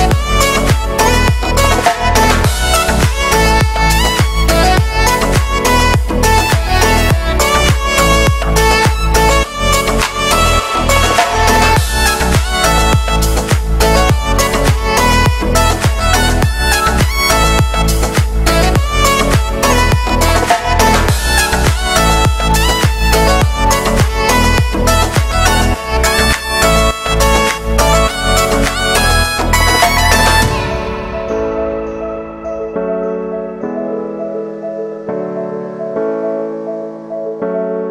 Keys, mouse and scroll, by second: 0.8 middle click, 1.0 alt+shift+right click, 1.7-2.9 middle drag, 2.9 alt+right click, 3.2-4.7 drag, 4.7 alt+right click, 5.0-6.2 drag, 6.2 scroll down 1, 6.4 middle click, 7.0 scroll up 1, 7.3 alt+right click, 7.5-9.3 drag, 9.3 alt+right click, 9.6 click, 10.4 scroll down 1, 10.6-12.1 shift+middle drag, 12.1-12.4 scroll up 2, 12.4 click, 13.2 middle click, 13.2 scroll down 2, 14.2 alt+right click, 14.4-17.2 drag, 17.2 shift+middle click, 17.8 click, 18.5 middle click, 18.8 click, 19.4 middle click, 19.7 click, 20.1 shift+middle click, 21.0-22.1 drag, 22.1 scroll down 2, 22.3-23.5 middle drag, 23.5-23.9 scroll up 1, 23.9 shift+middle click, 24.3-24.6 scroll up 2, 24.6 click, 25.3 alt+right click, 26.3 middle click, 27.0 scroll down 1, 27.2 middle click, 27.6 alt+right click, 27.8 middle click, 28.2 scroll up 2, 28.3-29.7 drag, 29.7 alt+shift+right click, 30.1 middle click, 30.6 scroll down 1, 30.8 shift+middle click, 31.6-33.6 alt+right drag, 33.6-36.0 drag, 36.0 alt+right click, 36.3 click, 36.8 scroll down 2, 36.9 middle click, 37.2-37.9 scroll up 5, 37.6 shift+middle click.